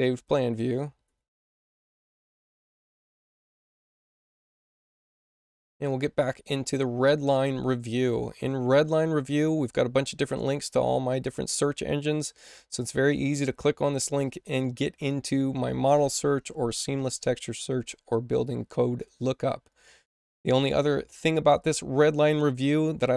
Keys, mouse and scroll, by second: 0.4 ctrl+w, 1.0 ctrl+w, 1.7 ctrl+w, 3.5 ctrl+w, 4.8 click, 5.8 click, 7.2 click, 12.7 click.